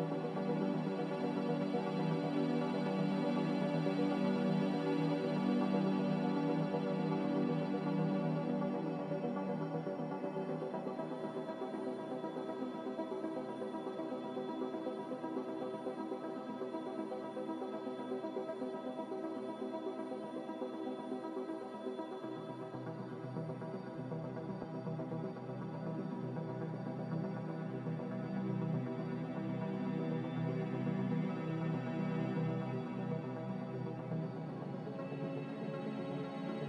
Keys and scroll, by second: 2.0 z, 8.2 typing, 8.5 Return, 10.5-11.1 typing, 10.7 Return, 14.6 z, 17.4 typing, 19.3-20.1 typing, 19.6 Return, 26.3 ctrl+z, 36.6 Return.